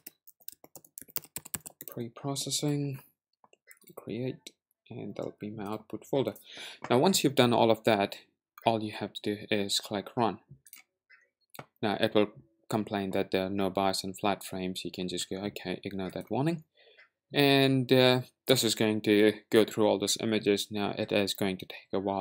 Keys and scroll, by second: 0.0-2.4 typing.